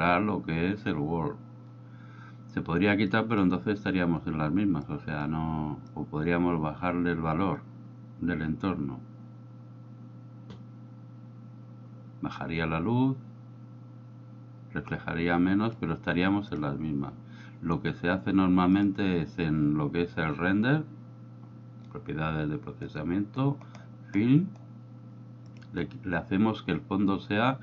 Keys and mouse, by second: 3.1 click, 5.0 click, 6.0-15.8 drag, 16.6 click, 18.8 click, 25.6 click.